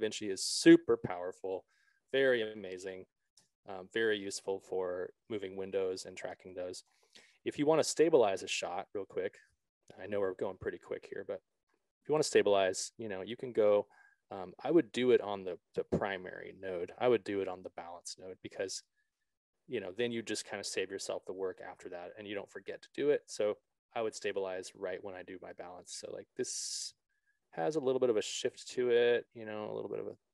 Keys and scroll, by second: 3.7 BackSpace.